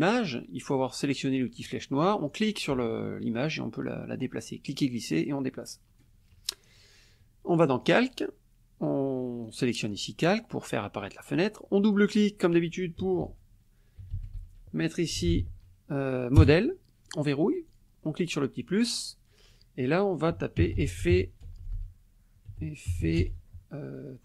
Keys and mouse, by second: 1.5 click, 2.3-6.2 drag, 7.8 click, 9.9 click, 11.9 click, 13.9-15.8 typing, 16.4 Return, 17.7 click, 18.6 click, 20.4-23.5 typing.